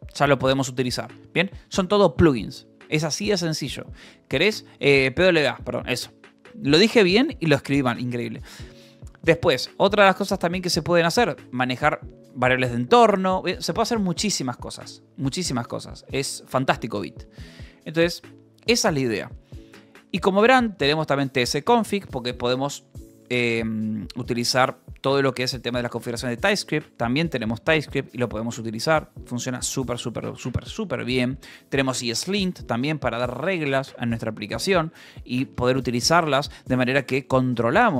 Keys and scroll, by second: 4.4 k, 9.5 shift+d, 9.5 Escape, 9.9 u, 10.8 shift+v, 10.9 Escape, 14.9 shift+v, 15.1 Escape, 18.1 ctrl+h, 19.8 k, 20.9 j, 30.4 k, 31.6 Return, 36.4 ctrl+h.